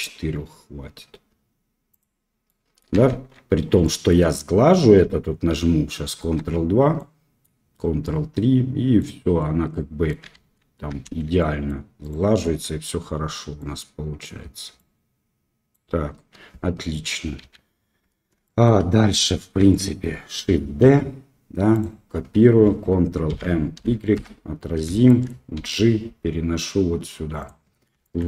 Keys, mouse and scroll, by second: 1.9 click, 2.4-2.7 middle drag, 3.0 shift+z, 3.8 middle drag, 6.2 ctrl+2, 6.9-7.4 drag, 8.0-8.9 drag, 9.3-10.1 middle drag, 10.3 shift+z, 11.3-11.6 middle drag, 12.0 click, 13.5 middle click, 14.7-15.7 middle drag, 16.1 KP_1, 16.3 middle click, 18.4 shift+drag, 19.7 shift+click, 20.8 shift+d, 23.2 ctrl+m, 25.0 shift+click, 25.5 g, 28.0 shift+click.